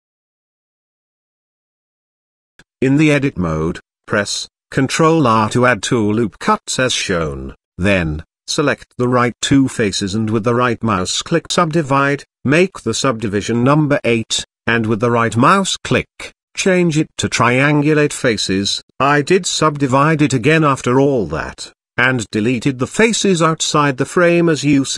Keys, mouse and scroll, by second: 2.5 Tab, 3.3 ctrl+r, 5.7 ctrl+r, 8.5 click, 9.7 shift+click, 13.7 click, 13.9 click, 14.3 click, 15.0 click, 15.2 click, 15.3 click, 15.8-17.1 right drag, 17.1 middle click, 18.3 middle click, 21.7 shift+middle drag, 23.1 middle click, 24.2 shift+middle click, 24.7 middle click.